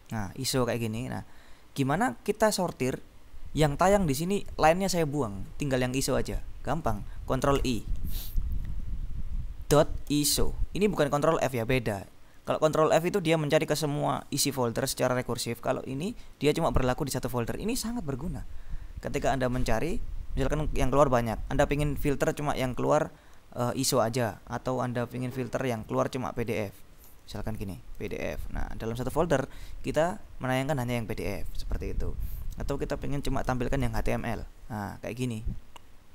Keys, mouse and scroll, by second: 1.4-2.6 drag, 7.6 ctrl+i, 9.6-11.1 typing, 26.4 click, 27.2 ctrl+BackSpace, 27.7 ctrl+p, 28.0 ctrl+d, 28.3 ctrl+f, 30.1-31.0 scroll down 2, 31.0-32.0 scroll up 2, 32.8 click, 33.6 ctrl+BackSpace, 33.9 ctrl+h, 34.2 ctrl+m, 34.3 ctrl+l, 35.1-36.1 scroll down 2.